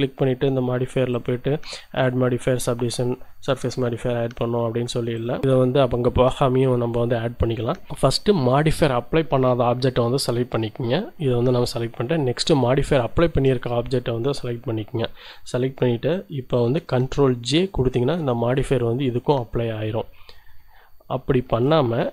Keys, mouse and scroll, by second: 1.1 click, 12.8 shift+click, 17.6 ctrl+j, 21.4 ctrl+z.